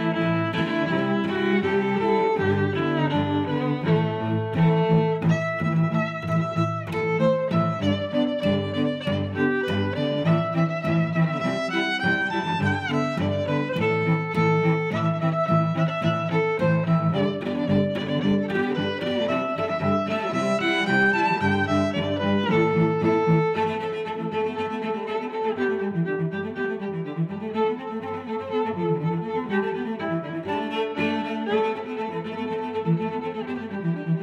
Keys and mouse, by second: 0.0 g, 0.2 z, 1.5 click, 2.4 middle click, 2.5 middle click, 4.3 click, 4.6 click, 5.4 click, 6.6 middle click, 7.5 click, 8.2 Tab, 9.7 click, 11.1 click, 11.7 middle click, 12.0 Tab, 14.1 click, 15.0 Tab, 15.0 middle click, 15.1 click, 15.2 click, 20.9 s, 21.6 g, 24.1 click, 24.1 z, 24.4 middle click, 25.5 click, 26.9 g, 29.0 y, 29.6 click, 29.7 Tab, 30.0 click, 30.3 Tab, 31.3 click, 32.4 g, 33.0 y.